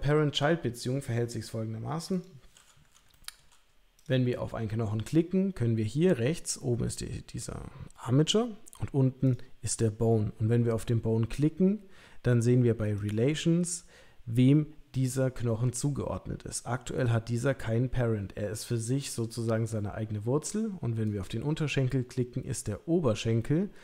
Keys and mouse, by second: 0.9 middle click, 1.7 g, 3.1 shift+middle click, 9.2 click, 13.0 click, 21.1 click.